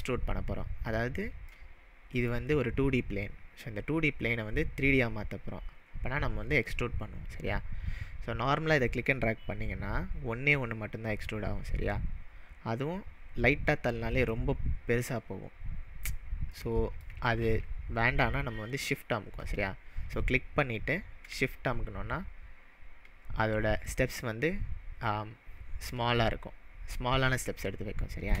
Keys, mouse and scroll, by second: 0.8 drag, 1.6-2.4 middle drag, 8.8-14.4 drag, 16.5-17.1 middle click, 17.4 ctrl+z, 20.1-28.4 drag.